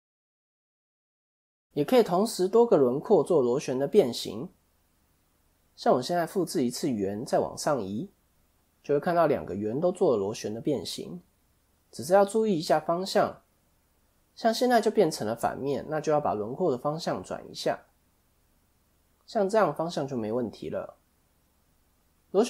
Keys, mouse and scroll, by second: 0.7 click, 1.7 KP_1, 2.4 scroll up 2, 2.8 shift+middle click, 3.3-3.7 scroll up 2, 3.7 Tab, 5.7 shift+d, 6.8 click, 9.8 click, 13.5 click, 15.5 middle click, 16.5 KP_7, 18.4 r, 20.2 middle click, 21.8 click.